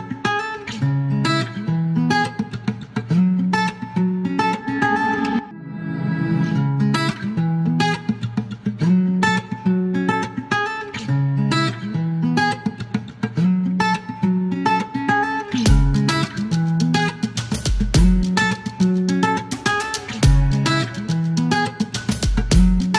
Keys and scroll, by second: 6.3 KP_0, 10.1 KP_9, 14.3 alt+m, 14.4 typing, 17.8 typing, 22.5 alt+u, 22.7 alt+c.